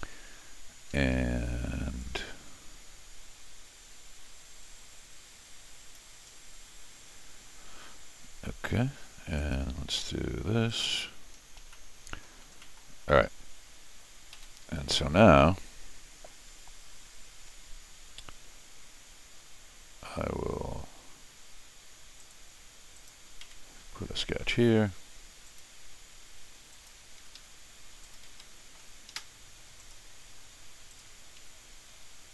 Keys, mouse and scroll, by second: 0.9 Escape, 1.1 Escape, 2.0-5.9 drag, 9.4 click, 10.7 click, 11.4 scroll down 2, 11.6 Escape, 11.7 middle click, 12.6 middle click, 13.0 scroll up 1, 14.3 r, 22.2 click, 22.9 click, 23.4 c, 25.4 click, 26.7 click, 27.2 Escape, 27.3 Escape, 28.0 click, 28.3 g, 28.8 scroll up 2, 29.1 Escape, 29.8 click, 30.9 click, 31.4 Escape.